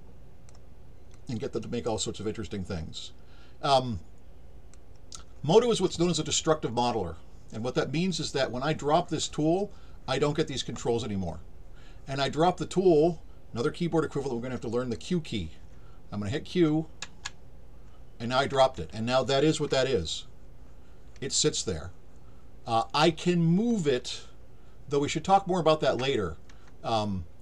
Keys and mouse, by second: 1.1-4.7 drag, 19.8-26.0 alt+drag.